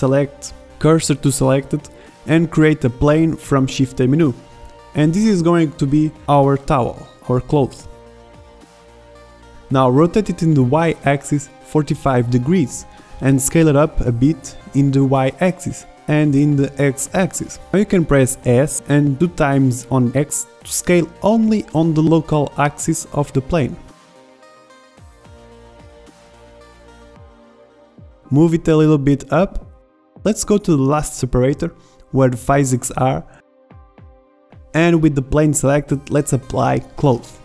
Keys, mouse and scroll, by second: 0.2 shift+s, 4.2 shift+a, 4.7 drag, 6.4 middle click, 6.6-7.4 middle drag, 9.4 r, 11.4 r, 13.9 s, 17.1-17.5 middle drag, 22.5 s, 27.1-27.7 drag, 27.7 r, 27.8 middle click, 29.2 middle click, 29.6 middle drag, 30.1-30.8 middle drag, 33.7-35.6 middle drag.